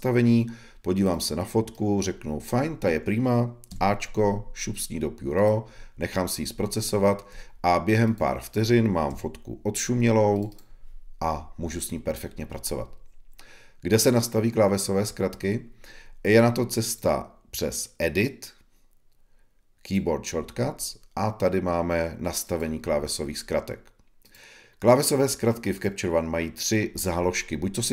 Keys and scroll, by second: 6.9 ⟲, 9.0 Right.